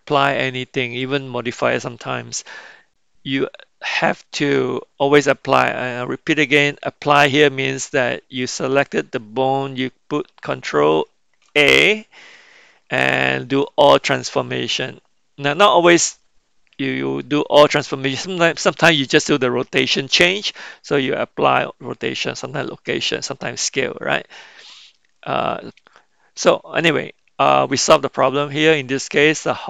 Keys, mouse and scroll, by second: 11.4 ctrl+a, 25.9-29.6 middle drag.